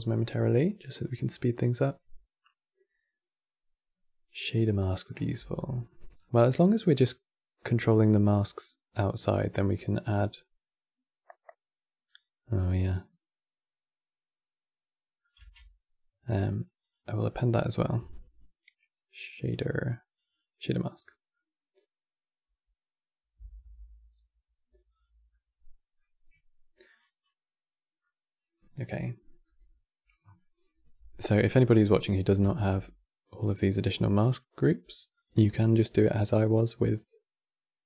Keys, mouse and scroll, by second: 2.6 click, 4.5 middle click, 4.8-5.3 scroll up 9, 5.3 middle click, 5.9 click, 6.5-9.2 middle drag, 9.2 scroll down 4, 9.4-12.5 middle drag, 15.1 q, 33.7 shift+a.